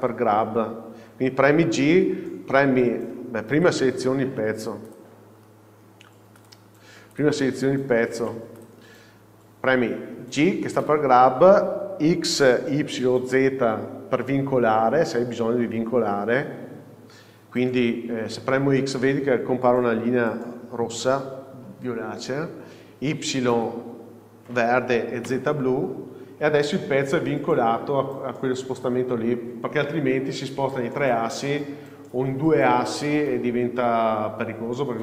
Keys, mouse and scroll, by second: 2.2 g, 4.2 Escape, 5.1 click, 6.6-7.4 drag, 8.4 alt+a, 8.8 click, 11.0 g.